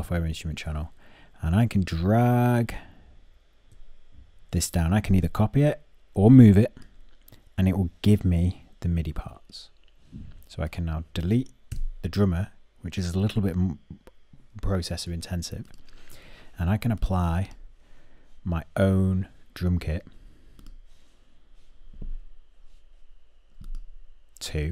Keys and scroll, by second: 11.3 BackSpace.